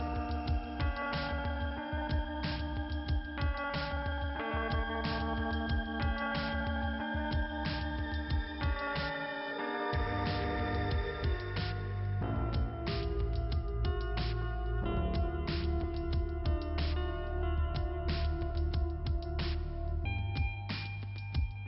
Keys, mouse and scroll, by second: 8.8 click, 9.6 click, 10.2 scroll down 1, 10.9 click, 12.7 click, 12.8 click, 13.4 click, 14.5 click, 14.6 click, 15.5 click, 16.1 click, 17.0 scroll up 2, 19.2 click, 20.5 click, 21.2 click.